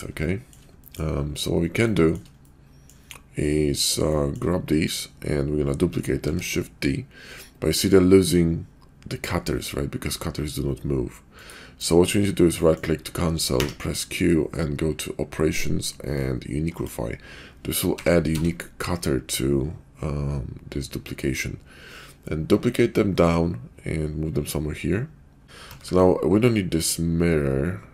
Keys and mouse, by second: 0.2 shift+middle click, 0.9 middle click, 1.8-2.2 shift+middle drag, 2.4 middle click, 4.1-4.4 shift+middle drag, 4.7 click, 6.1 shift+d, 12.6 click, 13.4 q, 17.9 g, 25.7 ctrl+`.